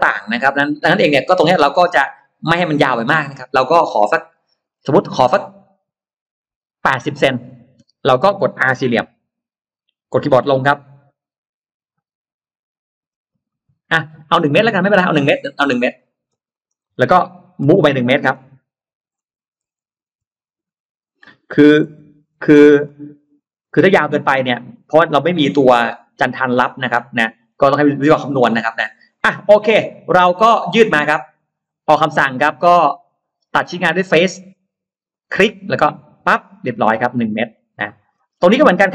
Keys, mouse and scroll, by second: 3.5-4.1 scroll up 1, 4.1 middle click, 5.3-5.6 scroll up 1, 6.9 middle click, 8.9 middle click, 9.1 r, 13.1 Down, 14.3 click, 14.5 middle click, 15.8 click, 16.3 click, 16.3 space, 16.5 click, 17.6 click, 17.6 m, 17.9 middle click, 19.9 Return, 21.3 BackSpace, 21.7 1, 22.3 Return, 22.9 Return, 22.9 space, 23.3-23.6 scroll down 1, 23.5 middle click, 24.1 scroll down 1, 24.2-24.7 scroll up 1, 26.7-27.0 scroll up 1, 26.9 middle click, 28.1-28.4 scroll up 1, 28.8-29.2 scroll up 1, 29.0-30.2 middle drag, 31.1 click, 33.9 click, 34.9 click, 35.8 click, 36.2 middle click, 36.9-37.5 scroll down 4, 37.7 scroll up 2, 37.8 middle click, 37.9-38.8 scroll down 3.